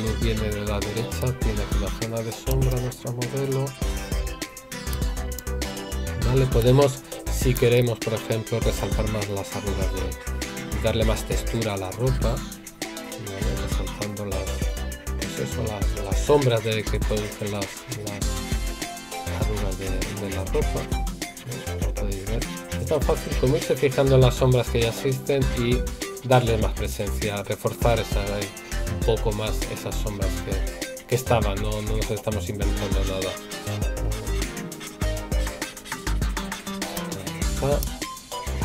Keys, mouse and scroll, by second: 7.6 right click.